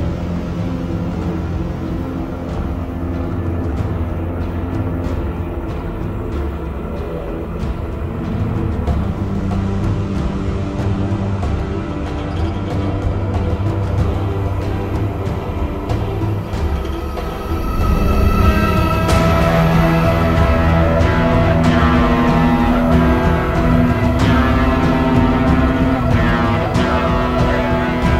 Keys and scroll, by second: 0.2 ctrl+z, 1.0 ctrl+z, 2.9 v, 3.5 ctrl+v, 3.6 ctrl+t, 9.6 ctrl+o, 12.0 ctrl+t, 18.1 ctrl+t, 19.0 ctrl+z, 26.1 ctrl+d, 27.1 ctrl+d.